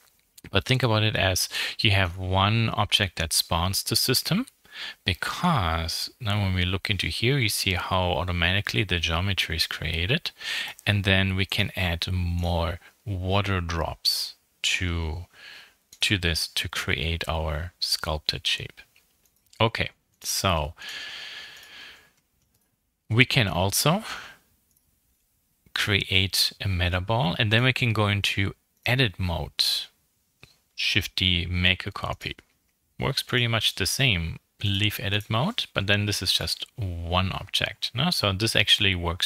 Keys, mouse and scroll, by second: 5.1 right click.